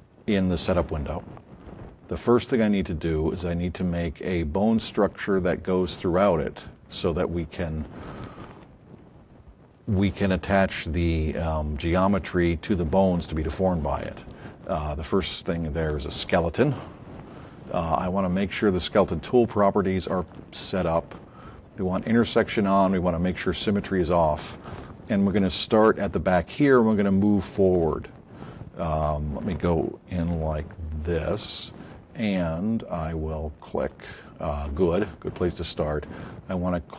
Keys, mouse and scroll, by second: 16.4 click, 20.1 click, 28.8 scroll up 2, 30.4 alt+click, 33.5 click, 36.5 click.